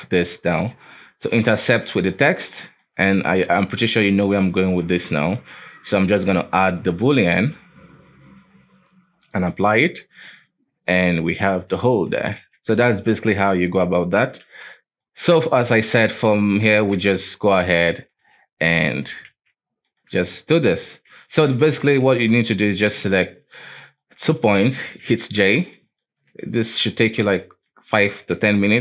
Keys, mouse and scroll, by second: 0.9-1.3 scroll up 5, 1.3-2.0 middle drag, 2.0-2.3 scroll down 1, 2.3-2.8 middle drag, 2.8 right click, 3.7-6.3 drag, 9.2 click, 9.9 right click, 10.1 x, 11.0 right click, 11.4-11.7 scroll down 1, 11.7-12.4 middle drag, 12.4 alt+a, 12.8-13.4 shift+middle drag, 13.4-13.9 scroll down 1, 13.9-14.4 scroll up 2, 14.4 KP_7, 15.0 right click, 15.8 right click, 16.0 shift+middle click, 16.5 Tab, 16.7 alt+a, 17.0 alt+KP_1, 17.4 right click, 17.9 shift+right click, 18.7 j, 19.3 alt+a, 19.8 right click, 20.3 shift+right click, 21.0 j, 21.8 alt+a, 22.3-22.8 scroll up 2, 22.8 shift+middle click, 23.6 right click, 24.0 shift+right click, 24.6 shift+middle click, 25.1 j, 25.6 right click, 26.0 shift+right click, 26.8 j, 27.4 shift+middle click, 27.8 scroll up 1, 28.1 alt+a, 28.7 right click.